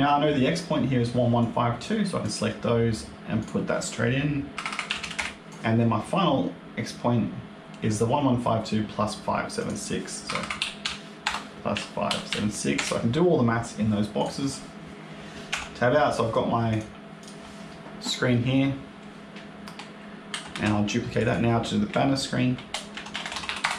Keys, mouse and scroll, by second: 1.3 click, 3.3 click, 4.6 KP_1, 5.4 click, 9.5 click, 10.3 KP_1, 14.1 click, 14.5-14.8 scroll down 2, 15.4 Tab, 15.7 scroll down 1, 16.6 click, 17.1 click, 20.2 ctrl+c, 20.4 ctrl+v, 21.0 click, 21.1 click, 23.1 n.